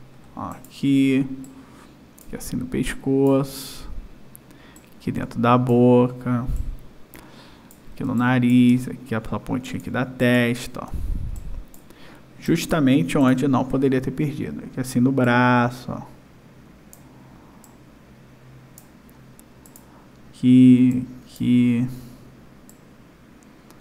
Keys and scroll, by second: 8.0 space, 10.9 space.